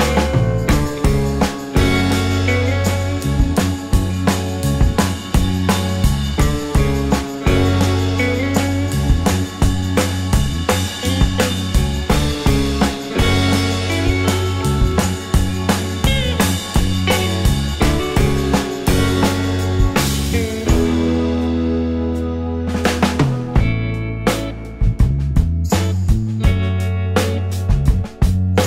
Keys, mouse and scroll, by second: 5.7 shift+scroll down 2, 6.0 alt+click, 6.9 right click, 8.3 scroll down 1, 9.3 scroll down 2, 9.5 alt+click, 10.3 alt+middle click, 10.6 alt+click, 10.9 alt+middle click, 11.1 alt+click, 13.9 scroll, 14.0-14.4 scroll down 1, 16.1 scroll down 1, 16.3 shift+click, 16.7 scroll down 1, 17.1 alt+click, 19.7 shift+scroll down 2, 20.0 alt+click, 20.5 alt+middle click, 21.5 ctrl+g, 22.5 double click, 23.0-26.0 typing, 26.4 Return, 28.3 double click.